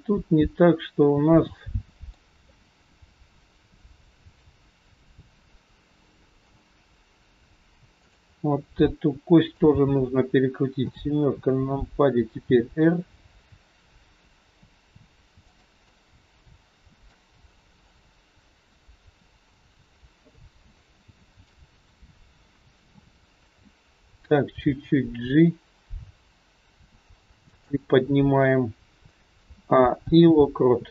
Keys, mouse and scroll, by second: 2.8 middle click, 4.4 middle click, 4.4 scroll up 1, 7.8 shift+click, 8.8 middle click, 10.7 KP_7, 12.8 r, 15.9 middle click, 17.5-17.9 scroll down 2, 17.9 middle click, 20.0-20.3 scroll up 1, 21.1 shift+middle click, 22.8 KP_3, 24.5 g, 29.4 a, 30.0 i.